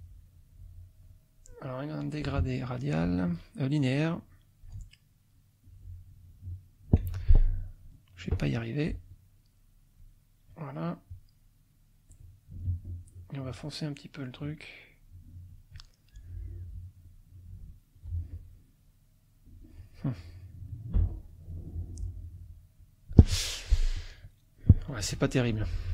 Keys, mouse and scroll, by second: 0.6 click, 2.0 click, 3.3-4.8 drag, 5.4 click, 6.5 click, 7.1 ctrl+z, 8.2 click, 9.1-10.1 drag, 12.1 click, 13.1-15.8 drag, 17.1-18.1 drag, 18.8-19.8 drag, 20.8 click, 22.0 click, 22.8 click, 23.3 F1, 23.5 click, 25.1 ctrl+z.